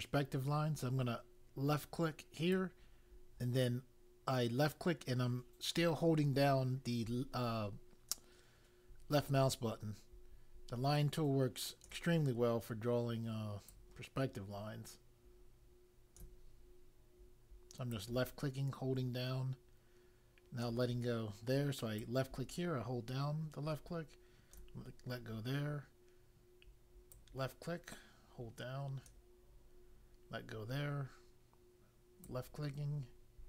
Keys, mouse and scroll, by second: 2.4 click, 13.6 click, 17.8 click, 22.0 click, 27.1 click, 32.2 click.